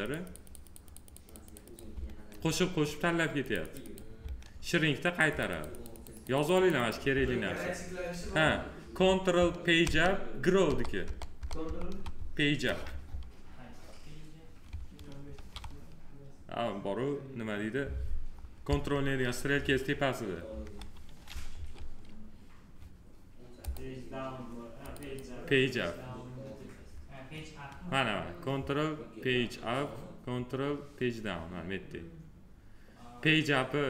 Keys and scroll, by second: 9.6 ctrl+Page_Up, 15.1 ctrl+z.